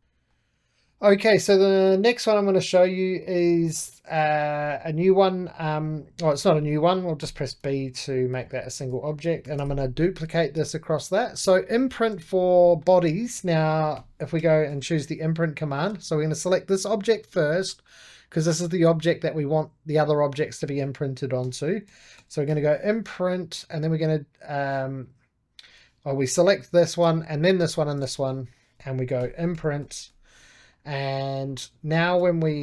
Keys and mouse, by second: 0.0-3.2 middle drag, 3.5-7.1 drag, 7.1 b, 8.2-9.3 ctrl+drag, 9.3 shift+d, 10.0 click, 11.0 right click, 11.4 middle click, 12.0 click, 12.4-13.9 middle drag, 13.6-15.1 typing, 15.8 Escape, 16.1-21.3 drag, 21.1-22.9 typing, 23.3-25.5 drag, 25.5 Escape, 26.0-29.1 drag, 28.8-30.5 typing, 30.6-32.6 drag.